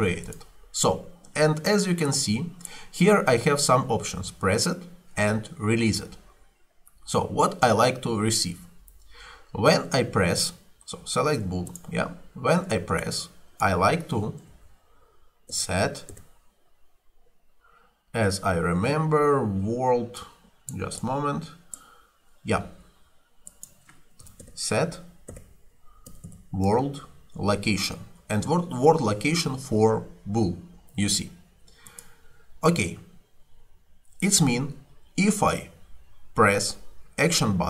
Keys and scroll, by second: 14.5 s, 15.5 e, 16.2 t, 24.0-27.2 typing.